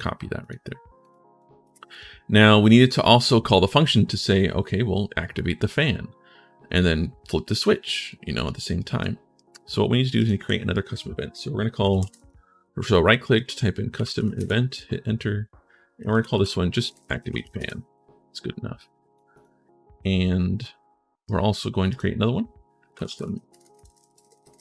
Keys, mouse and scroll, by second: 0.2 click, 0.8 click, 1.1 right click, 1.7 click, 3.0-7.9 drag, 8.1 click, 8.5 right click, 9.2 right click, 9.9 right click, 11.3-14.5 typing, 15.7-17.6 typing, 18.5 right click, 19.1 right click, 21.0 right click, 21.7 right click, 22.4-23.9 typing.